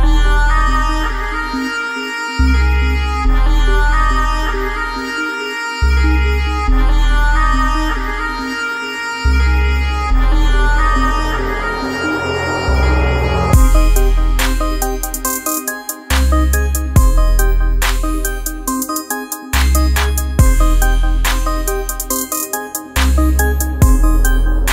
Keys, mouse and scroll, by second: 6.9-11.5 drag, 11.7-13.6 drag, 16.7 space, 16.8 click, 17.2 space, 20.8 right click, 21.3-24.7 drag.